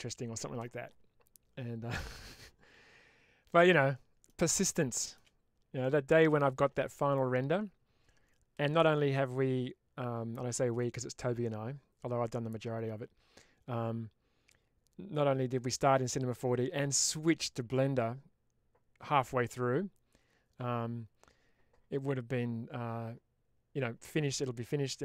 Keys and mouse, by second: 3.4 middle click, 4.6 shift+middle click, 5.7 middle click.